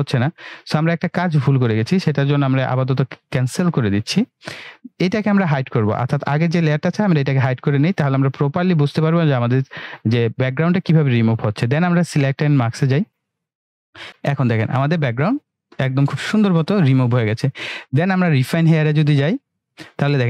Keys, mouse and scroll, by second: 6.9 click, 12.6 click, 18.6 click.